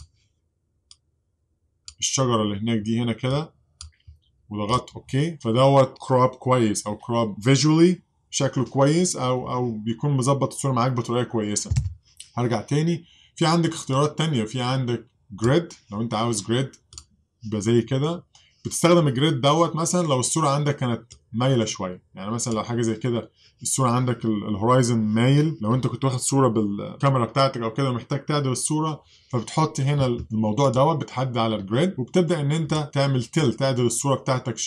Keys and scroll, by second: 11.8 super+z.